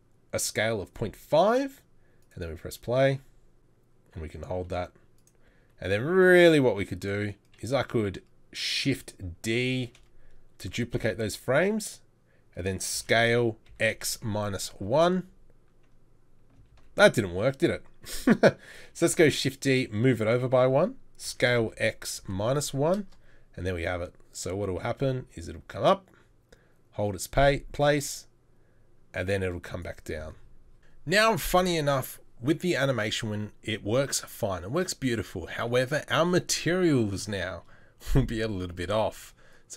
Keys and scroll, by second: 10.1 shift+d, 12.9 s, 16.8 ctrl+z, 18.9 shift+d, 21.3 shift+d, 21.4 s.